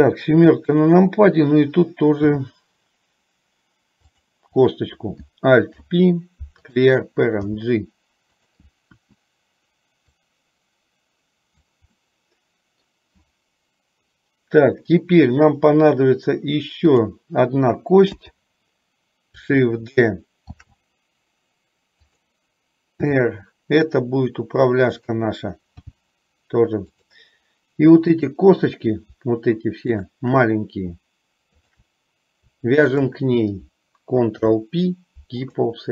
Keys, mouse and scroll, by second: 2.4 e, 4.8 click, 5.9 alt+p, 7.6 g, 9.1 KP_1, 10.4-11.8 drag, 12.1-13.1 middle drag, 16.9 click, 18.3 KP_7, 20.7 shift+d, 23.2 r, 25.9 g, 28.4 click, 30.1 shift+click, 33.1 shift+click, 34.4 ctrl+p.